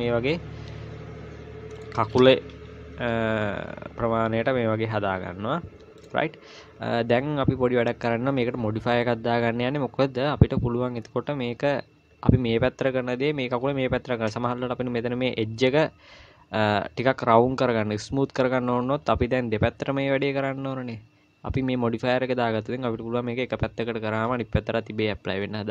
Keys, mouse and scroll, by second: 2.7 g, 5.7 i, 6.5-7.5 scroll down 4, 7.5-8.2 scroll up 4.